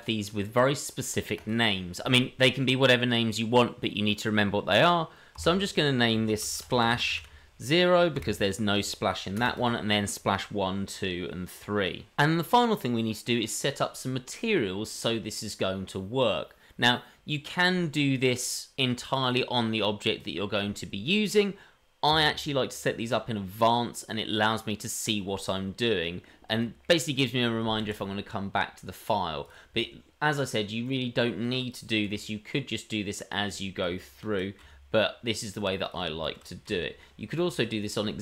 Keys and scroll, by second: 5.3 F2, 9.3 F2, 10.3 F2, 11.2 F2, 27.8 shift+a, 32.0 g, 34.2 shift+d, 34.5 g, 36.5 shift+d.